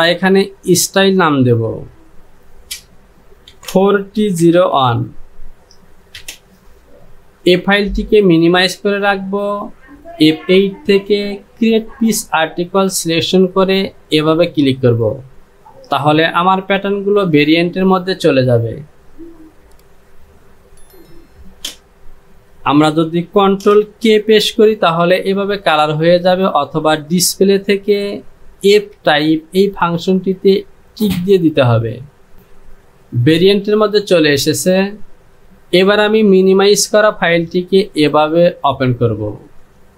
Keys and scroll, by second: 3.6 KP_4, 4.0 t, 4.5 KP_0, 4.8 KP_1, 6.2 Return, 24.1 ctrl+k.